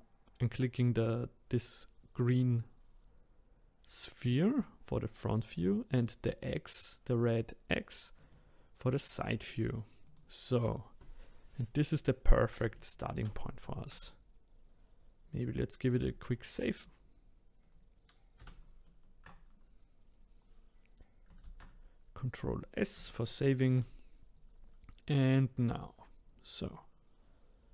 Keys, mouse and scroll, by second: 4.3 click, 8.2 click, 10.1 click, 20.3-21.4 scroll down 4, 21.4 ctrl+s, 22.3 scroll up 2, 23.2-26.3 middle drag, 26.7 click.